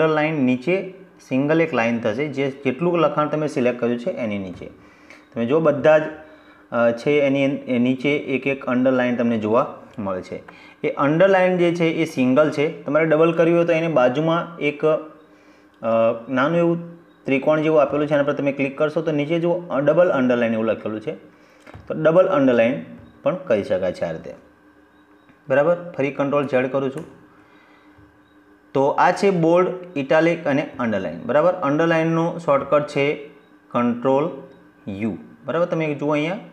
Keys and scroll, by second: 25.2 ctrl+z.